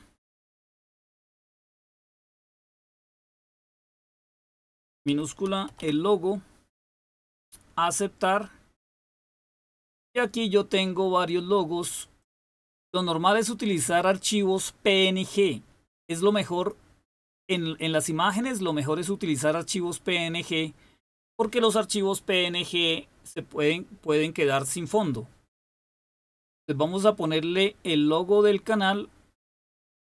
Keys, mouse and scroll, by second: 2.0-6.3 typing, 4.6 Caps_Lock, 7.8 click, 9.5 click, 12.2 click, 12.8 drag, 16.5 click, 17.2 click, 19.7-20.5 scroll down 1, 26.5 scroll down 1, 27.2 scroll down 1, 27.8-28.9 scroll down 2, 28.9-29.9 scroll down 1, 29.9-30.1 scroll down 1.